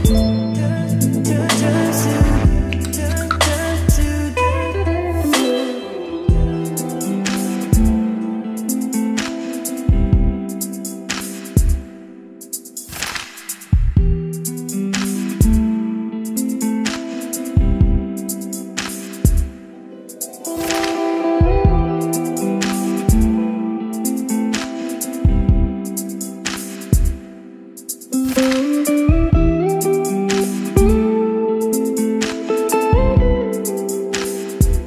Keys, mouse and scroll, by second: 0.8 click, 1.7 click, 2.0 Return, 2.0-4.5 typing, 3.0 Return, 4.3 Return, 9.4 click, 9.9 Return, 10.9 click, 11.8-13.4 middle drag, 13.4 click, 14.1 middle click, 14.8 click, 14.9-16.9 typing, 22.4-23.5 typing, 23.9 Right, 25.1-27.5 middle drag, 27.5 click, 28.1 Return, 28.6-29.6 typing, 30.3 Down, 31.4 Return, 32.0 shift+], 32.2 Return, 33.9 ctrl+s, 34.6 click.